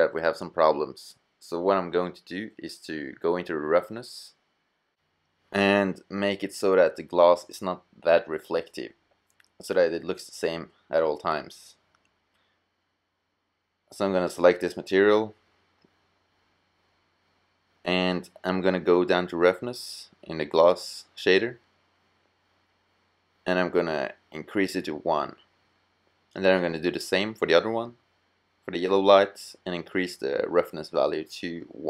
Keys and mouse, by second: 20.6-22.5 middle drag, 27.7-30.7 middle drag.